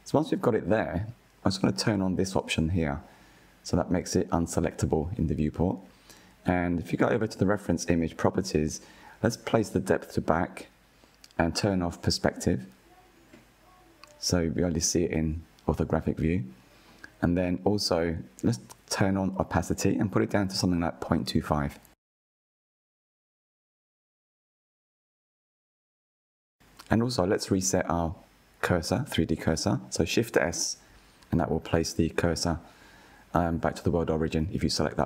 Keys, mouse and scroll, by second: 0.2-1.3 scroll up 4, 1.3-4.2 drag, 4.9-5.9 shift+middle drag, 5.9 click, 7.9 click, 9.5 click, 13.2 click, 14.2-15.9 middle drag, 15.9 KP_1, 17.6 scroll down 2, 18.1-19.6 shift+middle drag, 19.6 click, 20.3-27.1 drag, 27.5-28.0 scroll up 2, 30.8 shift+s, 34.7 click.